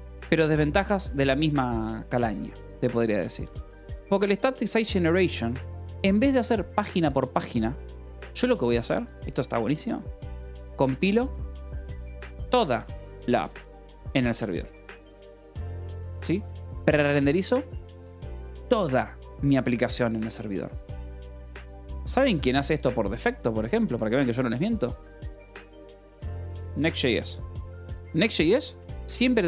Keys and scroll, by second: 3.8 space, 4.1 -, 4.8 space, 10.3-16.3 typing, 23.0 o, 23.7 Return, 25.3-26.7 typing, 27.6 Escape, 28.5 Escape, 28.6 k.